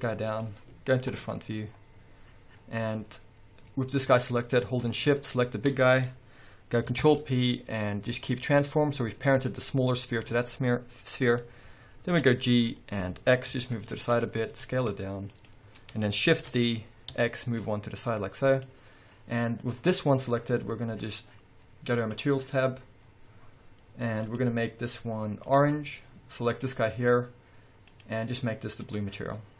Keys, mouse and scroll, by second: 0.6 click, 1.9-2.3 scroll up 1, 3.2 scroll down 1, 3.6 scroll up 1, 5.2 shift+click, 7.2 ctrl+p, 9.6 click, 12.3 g, 14.3 click, 14.7 s, 15.6 click, 16.5 shift+d, 18.8 click, 22.2 click, 23.2-24.1 scroll up 1, 24.4 click, 26.7 click, 28.1 click.